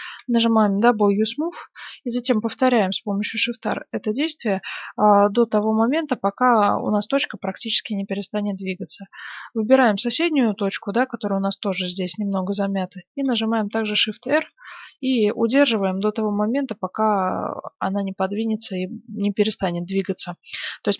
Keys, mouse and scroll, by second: 0.1 w, 2.3-6.8 typing, 9.0-10.7 right drag, 10.5-12.3 middle drag, 13.2-15.5 shift+r, 16.5-18.2 middle drag.